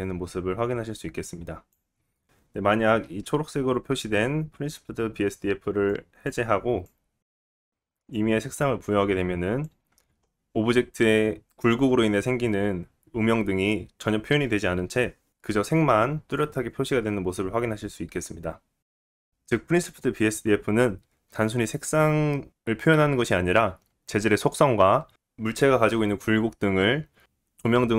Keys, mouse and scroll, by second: 2.2-3.7 middle drag, 3.7 click, 4.4-7.2 shift+middle drag, 4.5 shift+a, 5.6 BackSpace, 7.2-19.3 drag, 19.3-27.9 middle drag.